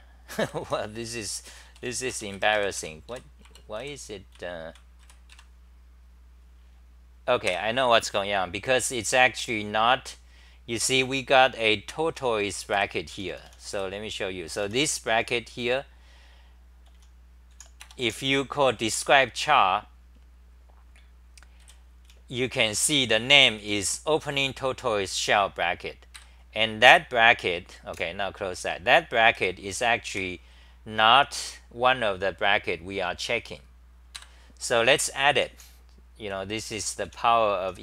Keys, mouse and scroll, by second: 0.0-2.3 typing, 2.5 Right, 3.5 Return, 3.8-5.5 typing, 7.5 ctrl+g, 12.1-15.2 typing, 16.9 n, 17.5 h, 21.6-24.4 typing, 26.1 ctrl+g, 27.9 super+w, 29.1-30.6 typing, 34.2 ctrl+g, 35.3-37.8 typing.